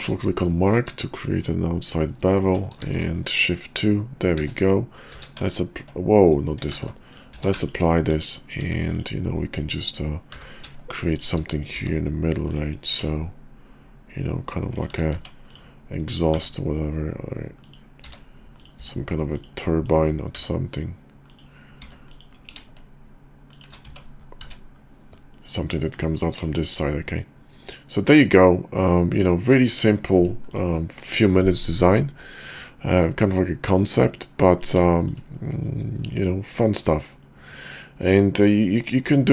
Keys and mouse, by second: 2.4 Tab, 2.8 shift+2, 3.4 middle click, 4.4 q, 5.0 q, 6.2 click, 6.8 ctrl+z, 7.3 q, 8.1 KP_5, 8.6 Tab, 8.9 click, 9.5 middle click, 10.3 i, 11.5 click, 11.8 e, 12.9 ctrl+b, 15.1 Tab, 16.4 i, 18.0 e, 18.8 s, 19.8 click, 20.4 i, 21.7 e, 22.4 ctrl+b, 23.9 Tab, 24.4 `, 25.1 click, 25.7 click, 26.5 shift+click, 27.1-29.5 middle drag, 30.0 shift+click, 32.5-34.6 middle drag, 34.9 shift+middle drag, 35.4 middle click, 37.2-38.4 middle drag, 38.9 middle drag.